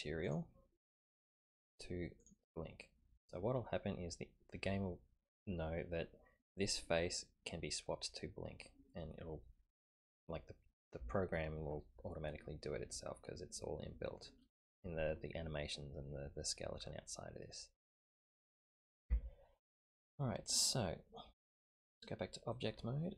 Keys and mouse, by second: 0.2-2.3 drag, 16.3-18.2 middle drag, 19.0 Tab, 20.3-21.2 middle drag, 21.8-22.6 drag.